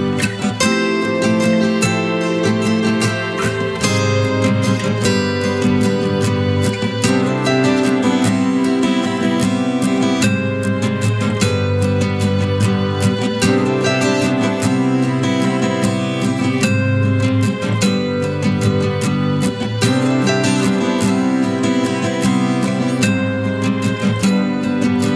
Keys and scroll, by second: 10.5 ctrl+z, 11.7 ctrl+alt+z, 12.2 ctrl+alt+z.